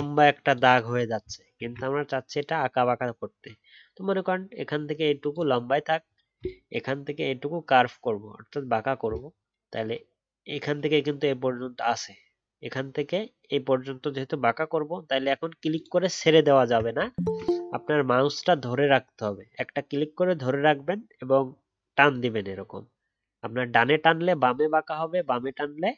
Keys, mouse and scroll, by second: 1.5 ctrl+z, 17.2 ctrl+z.